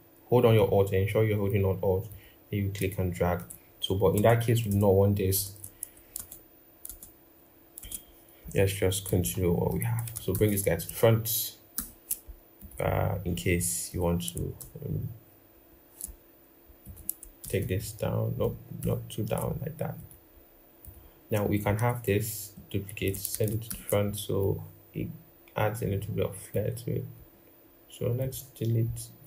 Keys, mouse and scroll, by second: 3.9 ctrl+z, 4.5 ctrl+z, 5.9 ctrl+z, 6.6 ctrl+z, 7.6 ctrl+z, 10.1 ctrl+shift+], 11.6 ctrl+-, 12.8-13.1 scroll up 1, 13.1-13.5 scroll, 14.4 ctrl+[, 15.3 ctrl+], 17.2 ctrl+[, 17.4 ctrl+[, 18.2 ctrl+], 18.6 ctrl+], 22.4 alt+click, 23.4 ctrl+shift+].